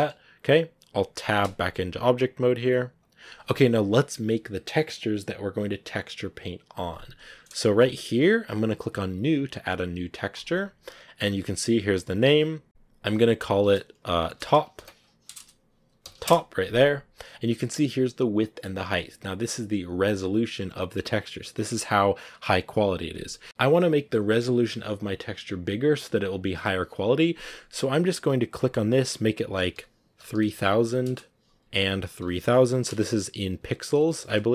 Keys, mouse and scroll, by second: 1.3 Tab, 2.5 scroll up 1.